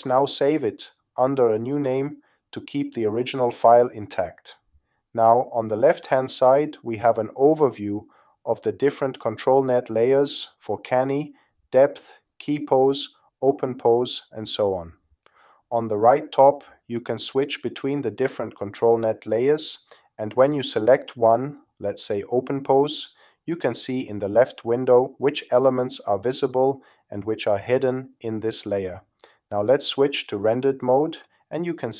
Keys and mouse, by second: 1.3 click, 7.2 click, 18.0-19.8 drag.